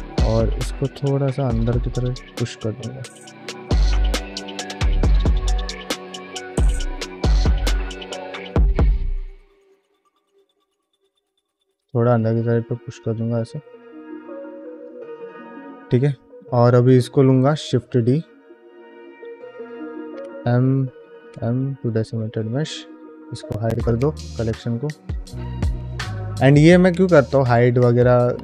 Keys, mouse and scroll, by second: 0.4-1.4 drag, 1.6 middle click, 2.3 click, 2.7 click, 3.2 middle click, 4.9 click, 5.4 middle click, 5.7 f, 6.1 middle click, 7.9 click, 8.3 middle click, 8.9 middle click, 9.6 click, 9.9 click, 10.1 middle click, 10.8 click, 11.2-12.4 middle drag, 12.8 f, 13.0 middle click, 13.7 click, 14.2 click, 14.5 middle click, 15.0 click, 15.3 middle click, 15.6 ctrl+Tab, 16.0 middle click, 16.6 ctrl+middle click, 17.8 shift+d, 19.6-20.7 right drag, 21.1 m, 23.8 click, 27.1 shift+middle click, 27.6 ctrl+middle click.